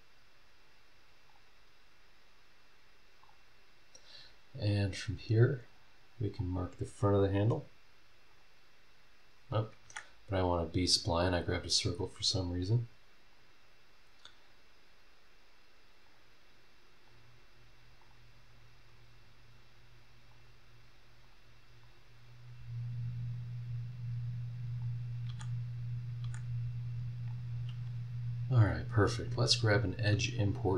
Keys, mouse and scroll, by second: 1.3 click, 3.2 click, 3.9 scroll down 1, 4.3-4.6 scroll up 1, 6.3 click, 8.3 click, 9.8 Escape, 11.2 click, 13.3 click, 16.0 click, 17.1 click, 18.0 click, 18.4-19.0 scroll down 2, 20.3 click, 21.2 click, 21.8 click, 22.2-22.6 scroll down 1, 22.7-23.4 scroll up 3, 24.8 click, 25.2 Escape, 26.2 Escape, 27.3 click, 29.2 click.